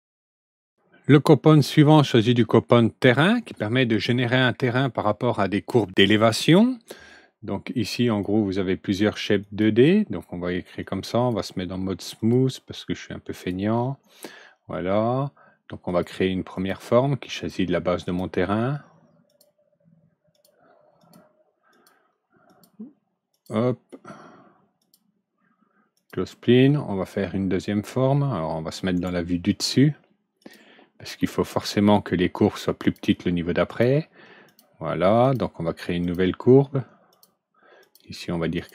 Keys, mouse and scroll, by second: 8.0 click, 9.3 click, 10.7-11.2 drag, 12.1 click, 13.3 click, 15.8 click, 16.4 click, 17.2 click, 18.0 click, 19.2 click, 20.2 click, 20.9 click, 21.6 click, 22.4 click, 23.2 click, 24.7 click, 25.9 click, 28.9 right click, 30.3 click, 31.1 middle click, 32.7 click, 33.6 click, 34.4 click, 35.1 click, 35.9 click, 37.0 click, 37.7 click, 38.5 click.